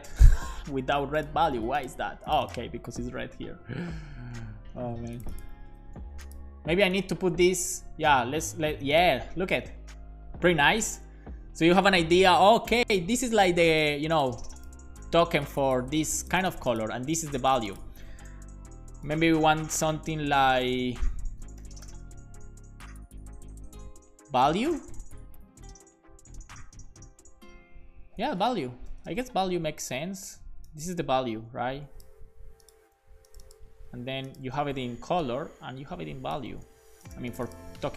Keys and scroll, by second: 2.9-3.8 typing, 4.1 Escape, 5.3-6.3 typing, 21.2-22.4 typing, 27.9-29.0 typing, 32.2 super+x, 32.8 super+v, 33.7 super+c, 34.5 super+v, 36.5 super+v.